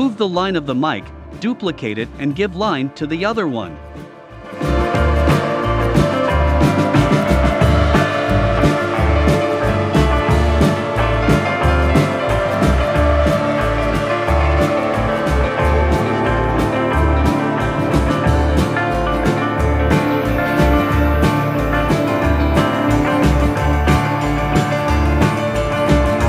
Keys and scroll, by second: 1.8 super+c, 2.4 super+f, 4.7 shift+Right, 5.6 shift+Left, 6.2 shift+Up, 10.2 i, 11.8 v, 15.8 shift+Left, 16.4 shift+Down.